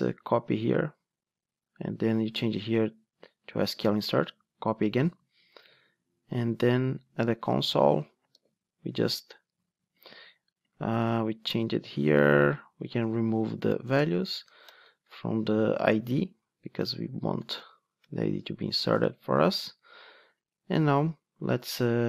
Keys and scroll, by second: 0.7 super+c, 2.4 super+c, 3.6 super+c, 8.3 super+v, 18.0 alt+BackSpace.